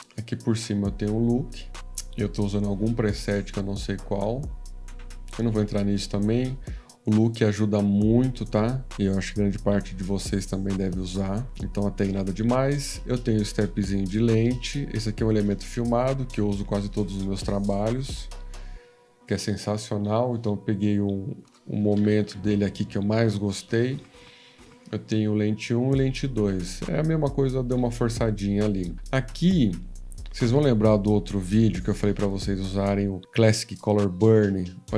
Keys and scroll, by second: 21.9 Home, 22.1 Home, 22.2 Home.